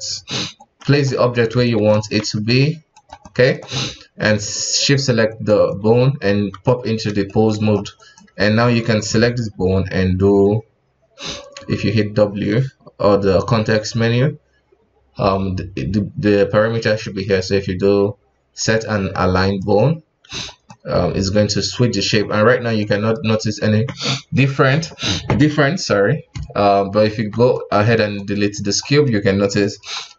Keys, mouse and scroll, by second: 0.1 ctrl+Tab, 0.5 right click, 0.8 KP_1, 1.1-1.6 scroll up 1, 1.6-1.9 shift+middle drag, 1.9-2.4 scroll up 2, 2.4 g, 3.2-4.8 middle drag, 4.8 shift+right click, 5.3 shift+right click, 6.2 ctrl+Tab, 6.7 middle click, 7.6-8.0 scroll up 2, 8.0 right click, 9.5 q, 11.5 w, 20.3-20.7 scroll down 5, 20.7-22.4 middle drag, 22.4-22.8 scroll up 2, 22.8-25.9 middle drag, 27.0 ctrl+Tab, 27.5 right click, 28.0 x, 28.5-28.8 scroll down 3, 28.9-29.5 middle drag, 29.5 right click, 29.8 KP_1.